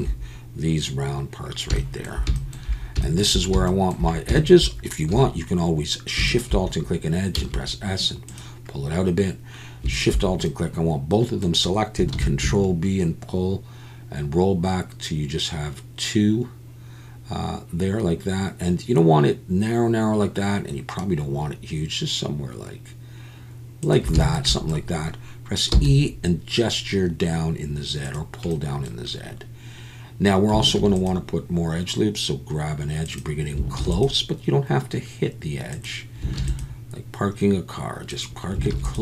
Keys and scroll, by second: 5.1 2, 7.3 s, 12.1 ctrl+b, 25.7 e, 30.8 ctrl+r, 33.8 ctrl+r, 36.4 ctrl+r, 38.7 ctrl+r.